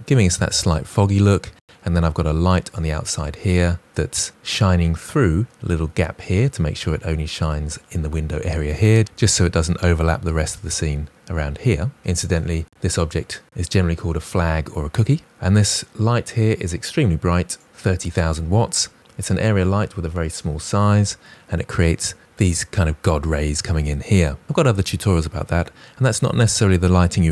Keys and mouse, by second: 2.4 drag, 3.8 middle drag, 12.4 click.